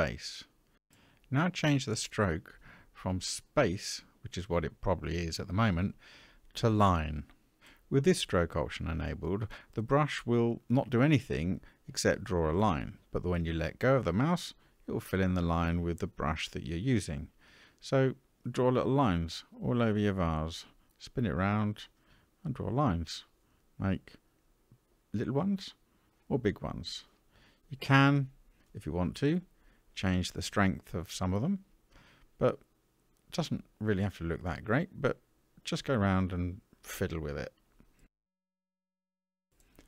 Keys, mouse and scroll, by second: 1.0-7.6 drag, 9.0 middle click, 12.1-13.6 ctrl+drag, 14.2 middle click, 15.4 ctrl+click, 18.0 middle click, 19.0-20.1 ctrl+drag, 20.6 middle click, 25.7 middle click, 25.7 f, 26.7-27.7 ctrl+drag, 28.1 middle click, 28.8 ctrl+click, 30.1 middle click, 30.9 ctrl+click, 32.2 middle click, 33.2 ctrl+click, 34.5-38.9 middle drag, 39.3 middle click.